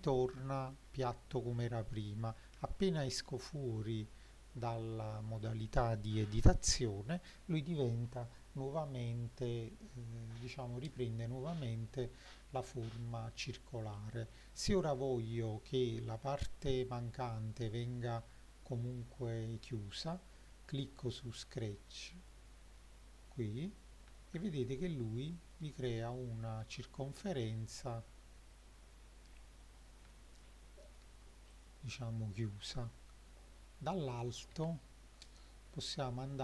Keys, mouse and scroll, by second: 2.6 Tab, 3.8-4.7 shift+middle drag, 5.2 middle drag, 14.0 click, 14.8 click, 15.5-15.8 middle drag, 16.1-18.2 shift+middle drag, 21.2 click, 22.3-22.8 shift+middle drag, 24.2-25.6 shift+middle drag, 25.9 middle drag, 26.5-27.2 scroll up 2, 27.2 middle drag, 27.9-28.9 scroll up 3, 29.0-29.7 scroll down 4, 29.7 middle drag, 30.1-31.0 shift+middle drag, 31.5 click, 32.8 Tab, 34.7 KP_7, 35.7-36.4 scroll up 3.